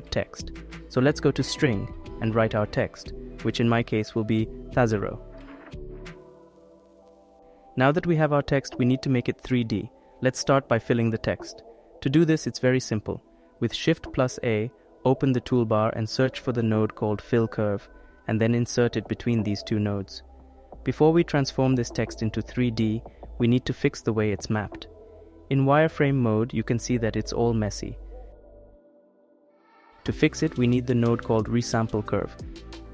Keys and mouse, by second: 0.2 click, 1.0 click, 5.3-7.7 drag, 6.0 BackSpace, 7.8 click, 8.4 click, 9.1 click, 12.9 shift+a, 15.5 l, 18.5 click, 29.8 shift+a.